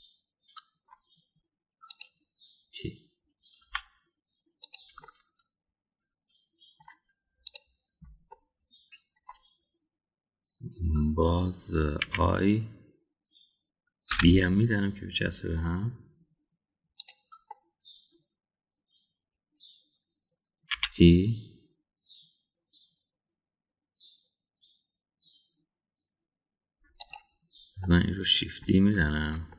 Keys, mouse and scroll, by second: 0.7-1.9 middle drag, 2.9 click, 4.6 e, 6.0-7.8 middle drag, 8.4 click, 9.3 middle click, 13.0 i, 18.4-19.1 middle drag, 21.7 e, 26.7 ctrl+e, 28.0 click, 28.8 middle click.